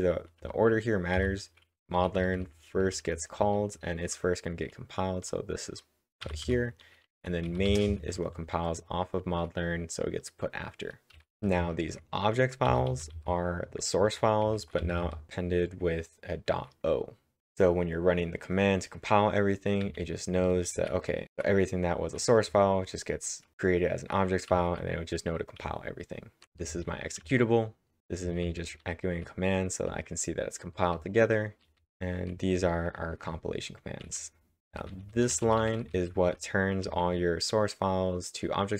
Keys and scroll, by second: 1.5-3.7 typing, 6.2-9.6 typing, 10.9-12.6 typing, 19.8-21.4 typing, 22.4 typing, 23.6-30.4 typing, 31.5-36.8 typing.